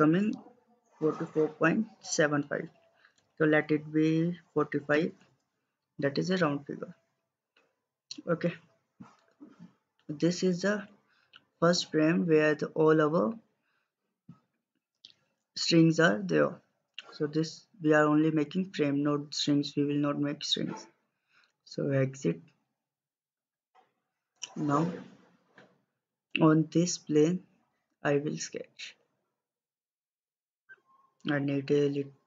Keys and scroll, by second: 4.3-5.2 typing.